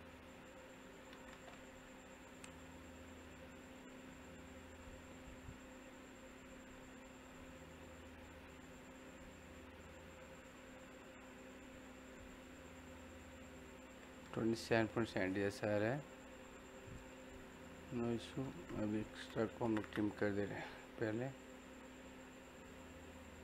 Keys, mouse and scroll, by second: 2.4 click, 13.4 click, 14.3-16.1 middle drag, 16.1-16.9 scroll down 1, 16.9 middle click, 17.5 scroll up 1, 17.7-19.0 middle drag, 18.8-19.7 typing, 19.9 click, 21.0 scroll up 1, 21.3 click.